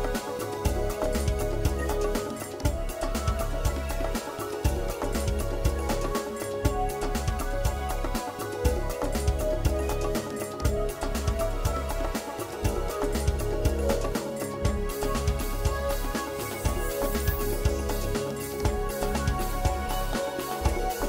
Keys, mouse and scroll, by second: 0.4 Tab, 0.7 middle click, 3.9 KP_7, 4.2 scroll up 3, 4.5 shift+middle click, 4.9 scroll up 1, 6.1 g, 8.4 click, 9.1 middle click, 11.6 KP_7, 12.1 scroll down 1, 12.5 shift+middle click, 12.7 shift+middle click, 13.0 shift+middle click, 14.4 shift+middle click, 14.7 shift+middle click, 15.1 shift+middle click, 15.4 middle click, 17.6 click, 18.2 click, 18.7 shift+click.